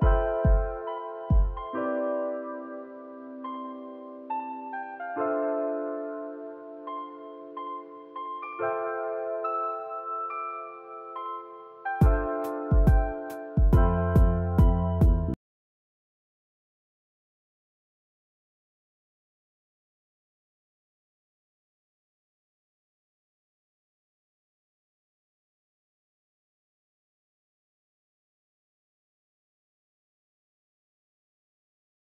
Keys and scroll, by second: 2.2 space, 6.2 space, 6.6 ctrl+s, 19.3 space.